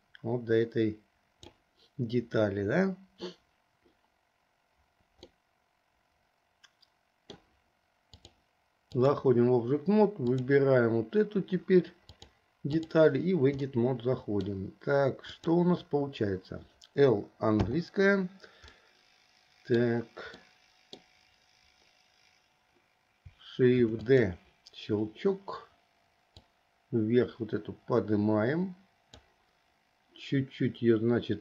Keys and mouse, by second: 5.6-7.6 middle drag, 8.3-9.4 drag, 12.2-13.2 drag, 13.9 middle click, 15.5 click, 17.9 l, 19.0-20.1 middle drag, 20.6 middle click, 24.0 shift+d, 26.5-29.4 drag.